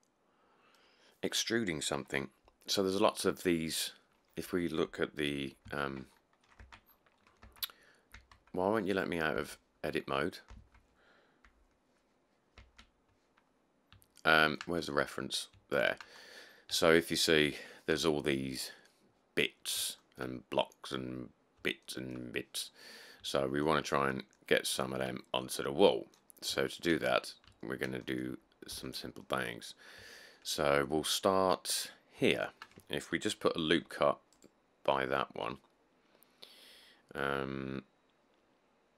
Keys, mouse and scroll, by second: 4.5 middle click, 4.7 middle click, 5.9 1, 6.3 middle click, 6.4 middle click, 6.8 Tab, 7.1 middle click, 7.2 middle click, 7.6 Tab, 8.3 Tab, 10.1 middle click, 10.3 middle click, 12.8 Tab, 14.0 middle click, 15.0 middle click, 15.1 middle click, 15.3 middle click, 15.6 middle click, 16.3-17.2 middle click, 16.4-16.8 scroll, 22.9 middle click, 23.0 middle click, 23.2 middle click, 25.3 middle click, 25.4 middle click, 25.6 middle click, 25.6 scroll, 25.7-26.0 middle click, 26.6 scroll, 27.2 middle click, 27.2 middle click, 27.3 scroll, 28.9 Tab, 32.2 middle click, 32.2 middle click, 32.3 middle click, 33.9 ctrl+r.